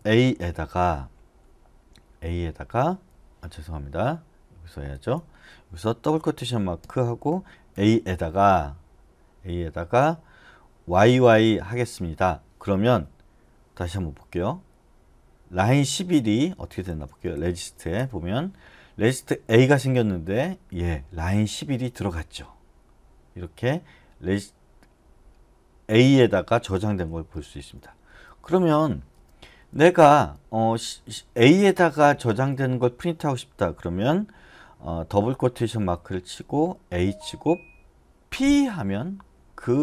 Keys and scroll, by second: 0.0 a, 7.5-8.2 typing, 11.0 y, 11.3 y, 17.0-18.1 typing, 27.4-28.1 typing, 29.1 Return, 31.5-32.5 typing, 36.0-36.9 typing, 38.4 p.